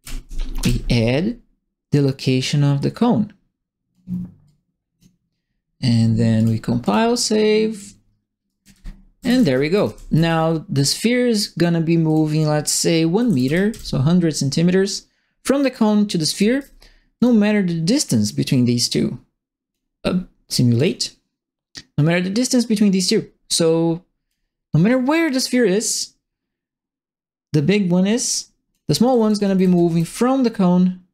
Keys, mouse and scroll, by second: 0.0 KP_Add, 0.6 Return, 2.7-3.9 drag, 4.4 click, 6.3 click, 6.8 click, 7.7 click, 8.3-10.4 typing, 8.4-10.2 right drag, 12.0 click, 13.1 KP_1, 13.2 KP_0, 13.4 KP_0, 13.7 KP_Enter, 16.0-16.8 typing, 16.2 right click, 17.1 click, 18.5-19.7 drag, 20.7 click, 22.3-24.2 drag, 25.3-28.7 drag, 28.8-30.2 typing, 29.0 right click.